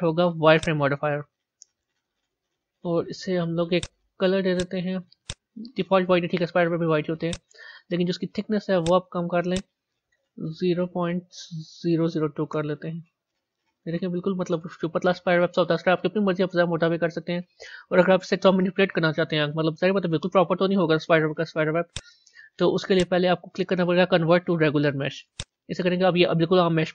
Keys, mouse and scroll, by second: 3.7 click, 4.5-7.3 drag, 8.7-10.5 drag, 10.5 Left, 13.8 a, 14.4-17.4 middle drag, 21.8 click, 22.8 click, 25.3-25.8 drag.